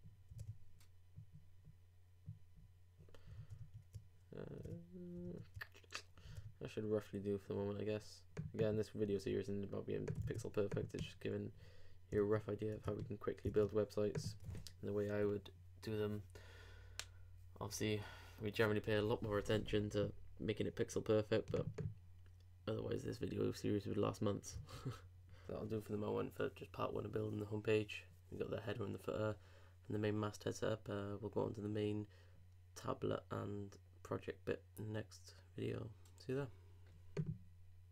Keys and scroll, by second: 3.7 super+Tab, 10.2 super+w, 12.2 super+Tab, 24.6 super+Tab, 25.9 super+Tab, 30.3 super+Tab.